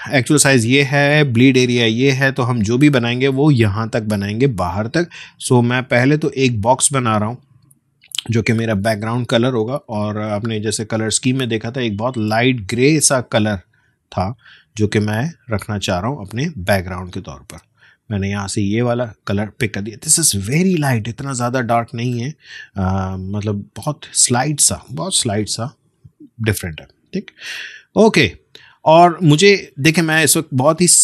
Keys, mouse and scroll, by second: 5.4 click, 8.6-15.9 drag, 16.4 space, 16.7 click, 16.9 space, 18.7 click, 19.5 space, 19.9 click, 20.1 space, 21.2-21.9 alt+scroll up 1, 22.9 click, 25.3 alt+scroll down 1, 26.3-26.9 alt+scroll up 1, 29.9-31.0 drag.